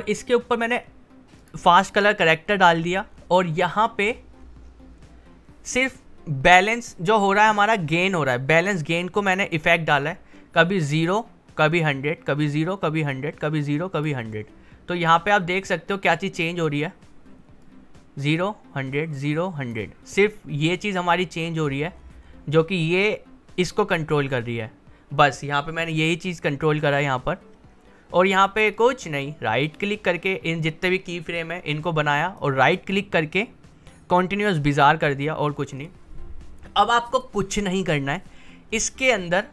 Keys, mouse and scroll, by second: 1.4 click, 2.4 scroll down 1, 10.0-14.5 drag, 14.5-15.9 scroll up 1, 15.9-21.6 drag, 21.6-22.5 scroll down 1, 26.8-32.3 drag, 32.3 right click, 35.0 click.